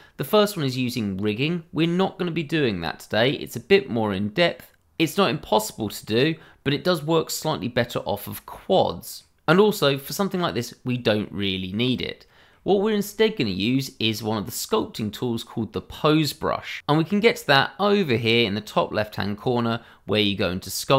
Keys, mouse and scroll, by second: 7.3 middle click, 11.7 middle click, 12.8 shift+middle click, 12.9 middle click, 13.0 shift+middle click, 13.3 scroll up 1, 15.7 middle click, 19.4 click.